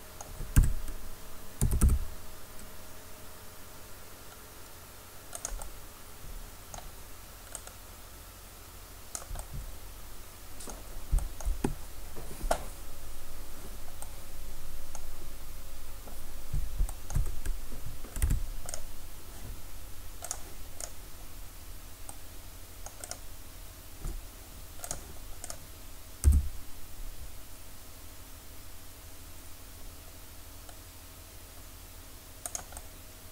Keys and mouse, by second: 0.6 Tab, 1.7 s, 5.6 right click, 5.7-7.3 drag, 15.4-18.2 middle drag, 18.2 Tab, 18.7-20.3 right drag, 26.3 e.